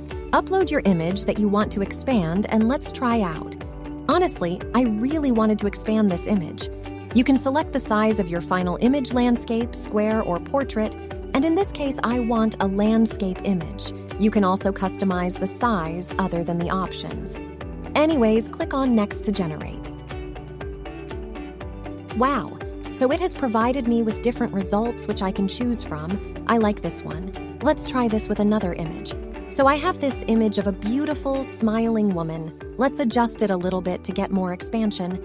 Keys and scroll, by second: 27.5 alt+a.